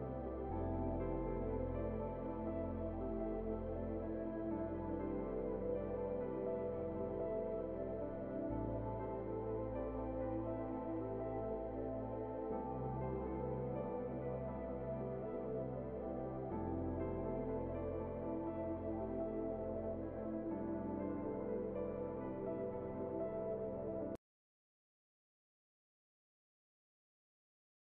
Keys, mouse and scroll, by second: 0.3 right click, 0.8-2.4 scroll up 1, 2.4-4.6 drag, 4.6 right click, 5.2-5.9 scroll down 1, 5.9 right click, 8.0 click, 8.2 scroll up 1, 8.4-10.5 right drag, 10.5 scroll up 1, 10.8 right click, 11.6 click, 11.7-15.2 right drag, 15.2 scroll down 1, 15.3 right click, 15.8-17.5 scroll up 1, 17.2-19.1 typing.